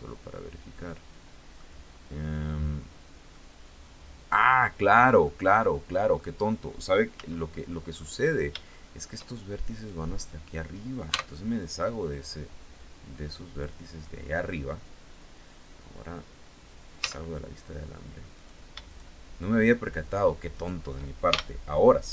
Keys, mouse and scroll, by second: 1.5 scroll up 1, 2.9-4.3 middle drag, 4.8-5.9 middle drag, 6.7 z, 7.5-8.8 middle drag, 9.3 right click, 10.7 x, 13.1 click, 16.5 z, 17.9 right click, 18.4 shift+right click, 19.3 shift+right click, 20.1 shift+right click, 20.8 shift+f, 21.4 scroll down 2, 21.9 Tab.